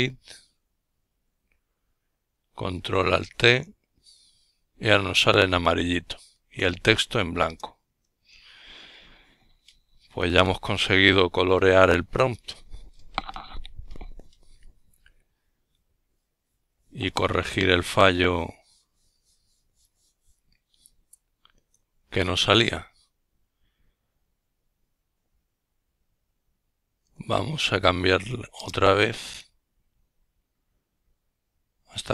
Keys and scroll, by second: 16.3 Up, 16.9 Up, 17.8 Return, 18.5-19.9 Down, 26.1 Right, 28.9 alt+i.